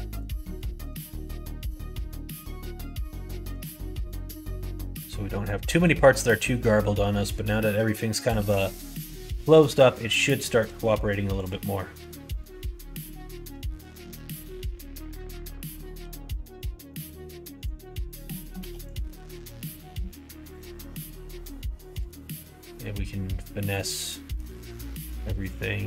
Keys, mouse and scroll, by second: 0.3 middle click, 1.3 shift+middle click, 2.0 middle click, 3.0 click, 3.2 middle click, 3.6 shift+middle click, 4.5-5.8 middle drag, 6.6-8.4 drag, 8.3 ctrl+z, 8.6 middle click, 9.2 middle click, 10.6 s, 11.6 scroll up 1, 11.6 middle click, 12.0 scroll down 1, 12.2 scroll up 1, 12.2 middle click, 12.2 right click, 13.0 middle click, 13.0 right click, 13.8 ctrl+z, 15.9 g, 17.6 click, 18.5 2, 18.9 click, 19.4 click, 20.5 g, 22.1-23.7 middle drag, 23.9 middle click, 25.1 1, 25.4 click.